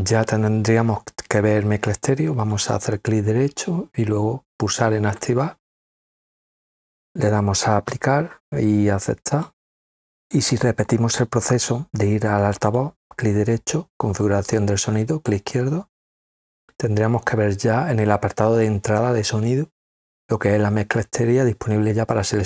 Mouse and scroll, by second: 2.4-3.4 right drag, 4.6 click, 8.9 click, 12.6 right click, 14.2-15.2 drag, 17.7-18.3 scroll down 2, 19.4 scroll down 2.